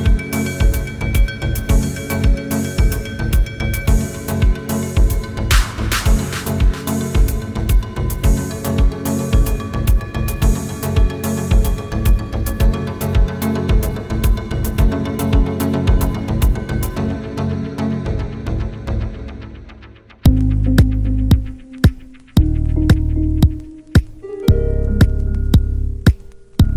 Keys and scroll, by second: 15.7 s.